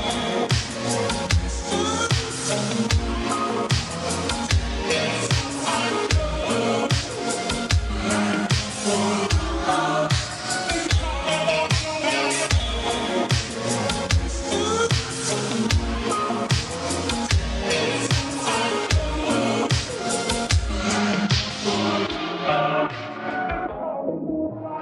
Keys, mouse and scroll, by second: 3.0 1, 5.4 right click, 10.3 click, 14.8 right click, 23.6 click.